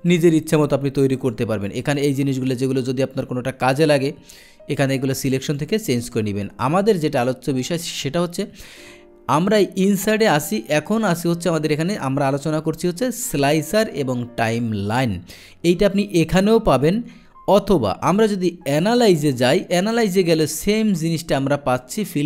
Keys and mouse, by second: 0.0 click, 1.2 click, 5.4 click, 9.5 click, 18.7 click.